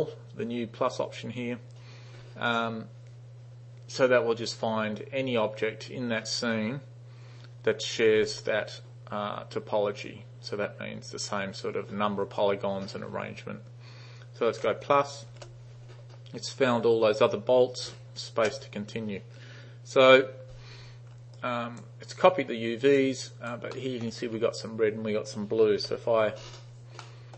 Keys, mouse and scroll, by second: 15.4 shift++, 18.4 space, 21.4 alt+right click, 22.3-23.1 alt+drag, 23.4 alt+right click, 23.8 alt+middle click, 25.9 u, 27.1-27.3 alt+middle drag.